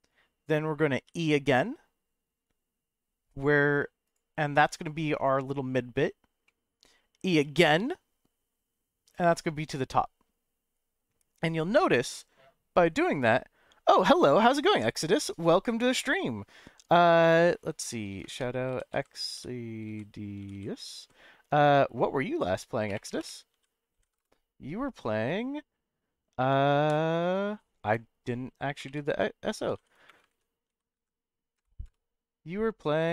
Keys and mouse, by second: 1.1 e, 4.0 click, 4.4 middle click, 6.4 middle click, 7.3 e, 9.1 click, 9.4-11.4 middle drag.